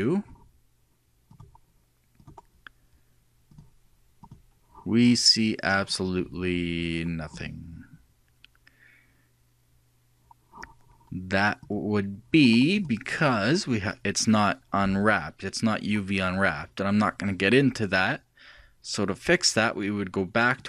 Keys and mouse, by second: 1.7-2.8 drag, 4.1-5.4 drag, 12.3-14.7 drag.